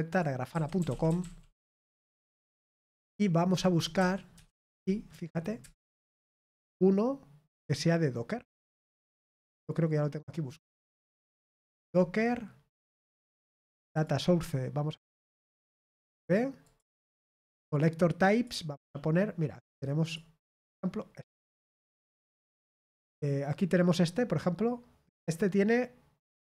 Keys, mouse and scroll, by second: 0.0 click, 0.5 typing, 2.2-3.1 typing, 13.9 click, 16.6 click, 18.3 click, 20.0 click.